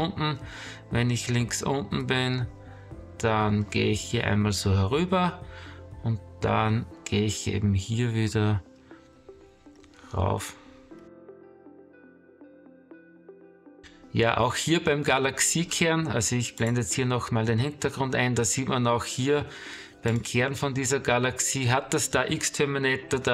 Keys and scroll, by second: 0.8 space, 2.3 space, 4.8 space, 9.5 space, 11.2-13.4 typing, 14.6 space, 23.2 space.